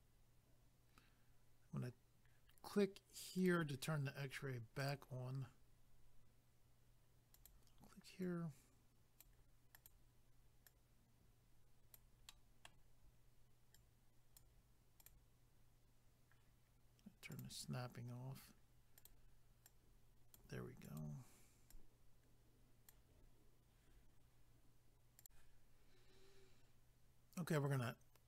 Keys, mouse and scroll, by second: 3.4 click, 3.5 click, 4.8 click, 4.9 click, 7.4 click, 7.5 click, 8.2 click, 9.8 click, 9.9 click, 10.7 click, 12.3 middle click, 13.7 click, 15.0 click, 15.1 click, 17.3 click, 17.4 click, 19.0 click, 19.1 click, 19.6 click, 20.8 click, 21.0 click, 21.7 click, 25.2 click.